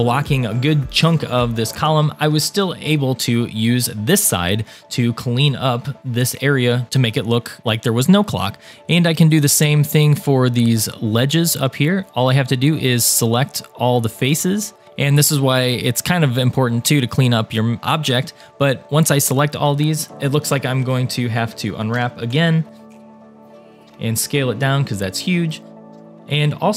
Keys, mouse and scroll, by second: 6.9 scroll down 1, 7.5-8.8 middle drag, 9.0 shift+click, 9.3-10.6 shift+drag, 11.1 shift+click, 11.5 shift+click, 11.9 shift+click, 13.2 shift+click, 14.2 shift+click, 14.6 shift+click, 15.0 shift+click, 15.6 shift+click, 16.6 shift+click, 17.1 shift+click, 17.8 middle click, 18.8 shift+middle click, 20.8 a, 22.0 u, 22.9 scroll down 3, 23.2 shift+middle click, 23.9 s, 25.9 g.